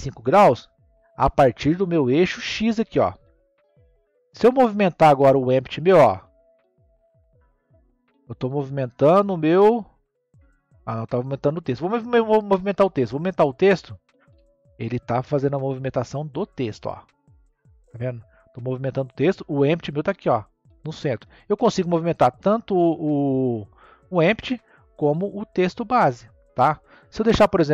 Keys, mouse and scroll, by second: 0.8-5.1 middle drag, 5.1 click, 10.2 click, 11.3 click, 13.1 click, 19.8 click, 21.6 click, 24.8 click, 25.6 click.